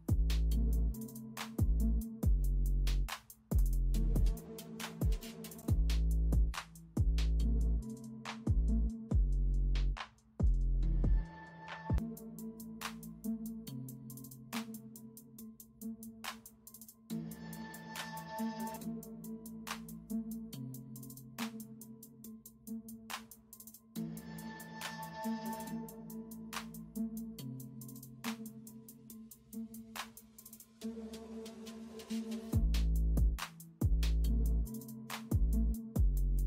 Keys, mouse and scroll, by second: 0.0-14.9 typing, 4.7 ctrl+m, 7.4 ctrl+shift+u, 9.7 ctrl+alt+z, 10.2 alt+click, 16.5 space, 18.5 ctrl+b, 21.7 space, 22.7 ctrl+alt+z, 24.5 ctrl+alt+z, 25.0 ctrl+j, 25.5 ctrl+j, 26.6 ctrl+shift+u, 27.8-29.4 typing, 31.8 space, 32.5 ctrl+b, 33.0 ctrl+m, 35.2 ctrl+b, 35.8 ctrl+m.